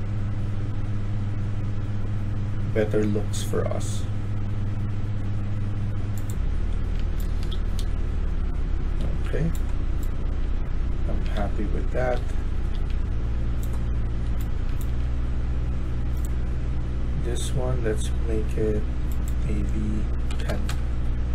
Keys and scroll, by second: 7.0-12.6 typing, 14.0-14.9 typing, 20.0-21.3 typing.